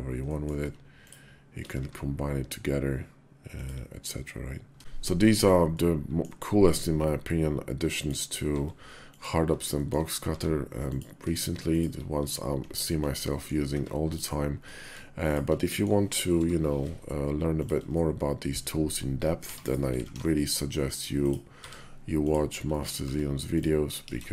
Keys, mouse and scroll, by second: 0.1 middle click, 1.5 q, 4.7 shift+2, 5.5-6.1 middle drag, 6.6 q, 7.6 click, 8.2 q, 9.6 shift+drag, 10.1 q, 12.0 q, 13.1 click, 13.6 Tab, 13.9 click, 14.5 click, 15.5 click, 16.2 i, 17.7 click, 19.1 e, 19.8 alt+s, 21.3 s, 22.5 click, 22.8 Tab, 23.3 click, 23.8 ctrl+b.